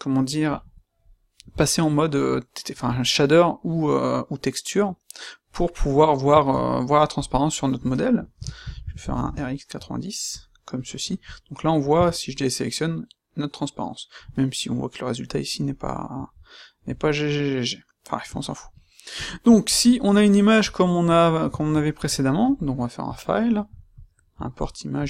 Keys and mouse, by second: 6.0 middle click, 6.4-6.8 middle drag, 7.1-8.3 right drag, 8.3 r, 10.2-10.6 drag, 10.9 middle click, 11.1-11.7 middle drag, 12.0 a, 22.3 middle click.